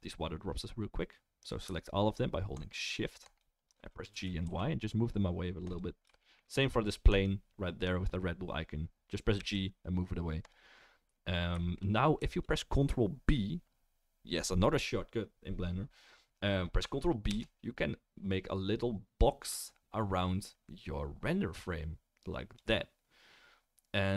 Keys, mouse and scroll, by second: 2.6 shift+middle click, 2.7-3.3 shift+right drag, 3.3 shift+middle click, 3.4-24.1 shift+right drag, 4.1 g, 7.2 click, 7.2 middle click, 9.4 g, 17.3 ctrl+b, 17.5-22.7 middle drag.